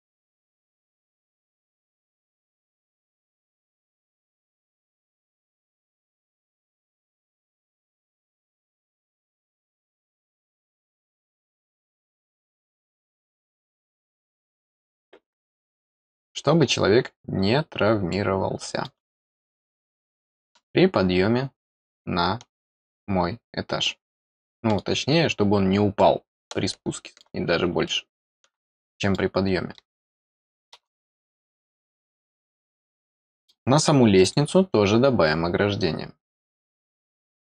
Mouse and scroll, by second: 2.0 click, 6.2 click, 8.2 click, 12.1 click, 13.4 click, 13.6 click, 16.4-17.4 scroll down 2, 18.1 middle click, 19.9-24.7 middle drag, 25.9-27.2 middle drag, 27.8-29.1 middle drag, 29.7 middle click, 33.1 middle click, 34.2 click, 36.5 click.